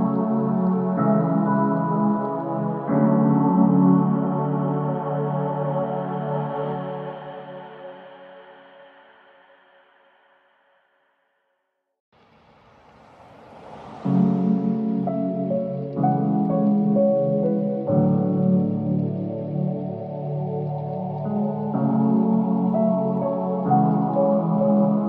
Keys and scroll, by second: 3.8 shift+Page_Down, 4.5 Escape, 15.5 shift+F2, 15.8 Escape, 16.8 F9.